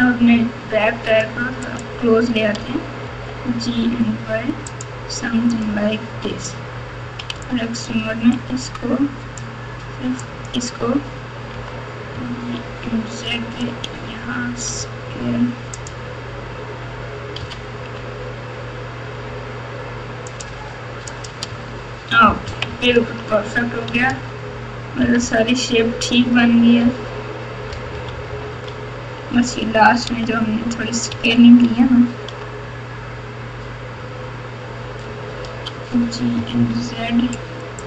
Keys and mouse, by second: 1.7 click, 2.5 g, 5.5 click, 6.0 Tab, 7.3 alt+z, 7.4 alt+click, 8.4-9.3 drag, 10.2 drag, 11.6 g, 14.7 s, 17.4 g, 21.1 click, 21.6 Tab, 22.4 KP_6, 22.6 KP_6, 22.8 KP_6, 24.1 alt+z, 25.0 KP_6, 25.2 KP_6, 26.1-26.8 KP_Add, 27.7 KP_Subtract, 27.9 KP_Subtract, 28.1 KP_Subtract, 28.3 KP_Subtract, 28.4 KP_Subtract, 28.5 KP_Subtract, 29.9 ctrl+z, 30.1 ctrl+z, 31.2 ctrl+z, 31.7 ctrl+z, 35.4 g.